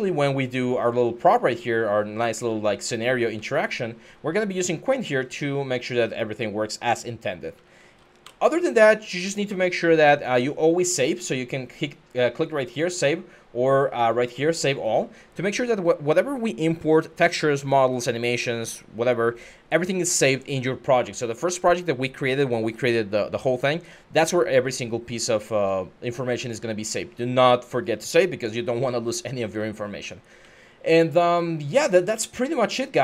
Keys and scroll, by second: 0.0-7.7 typing, 8.0 Escape, 24.9-33.0 typing.